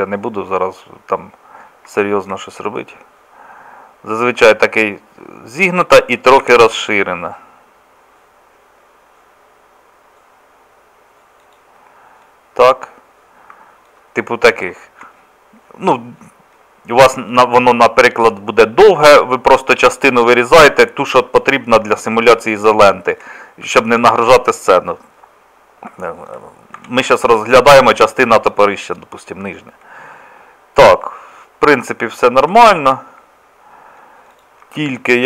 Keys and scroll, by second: 6.4 s, 26.8 Tab, 34.7 Tab.